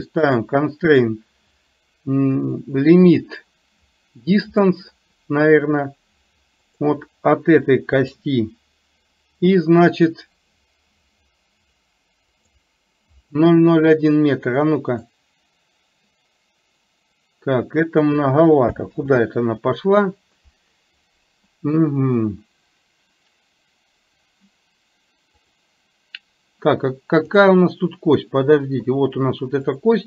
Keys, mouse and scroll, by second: 0.4-4.9 drag, 6.8 click, 12.5 click, 15.3-18.3 drag, 25.5-27.4 drag, 29.9 click.